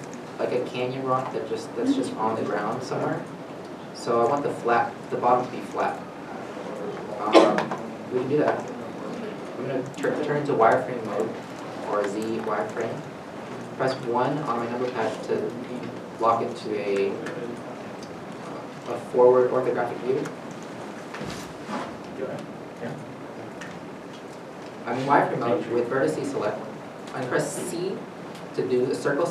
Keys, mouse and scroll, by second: 1.4 Tab, 2.2 middle click, 2.4 Tab, 3.6 middle click, 4.0 g, 4.6 middle click, 5.3 scroll, 5.4 middle click, 5.7 g, 6.1 Tab, 6.6 middle click, 7.9 Tab, 8.5 middle click, 11.9 middle click, 11.9 z, 12.7 click, 13.4-14.2 scroll, 14.9 KP_1, 16.8-17.6 shift+scroll down 2, 17.8-19.7 scroll up 1, 20.3 scroll up 1, 20.3 a, 20.9 r, 21.2 1, 21.9 8, 22.2 Return, 22.9 g, 28.0 c.